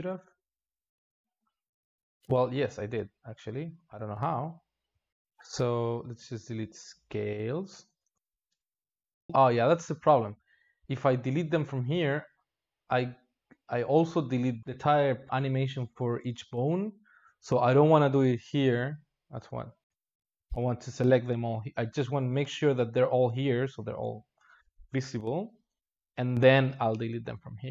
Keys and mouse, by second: 0.0 ctrl+space, 1.6-3.5 drag, 3.5 ctrl+z, 4.1 ctrl+z, 6.9-17.2 drag, 17.2 a, 17.8 a, 25.7-27.7 drag.